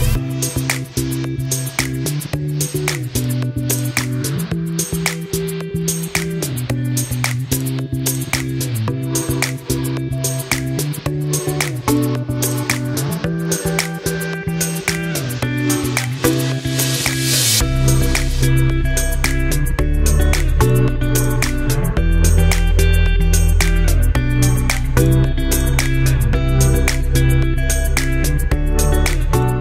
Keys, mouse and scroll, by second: 4.3-4.9 scroll down 1, 4.9 click, 6.2-7.6 scroll up 1, 7.6 e, 8.2-11.0 drag, 11.0 shift+F2, 13.0 click, 14.8 scroll down 1, 15.9-20.1 drag, 20.6 scroll down 1, 21.2-23.2 drag, 23.2 e, 23.8-26.4 drag, 26.4 shift+F2, 27.5 click.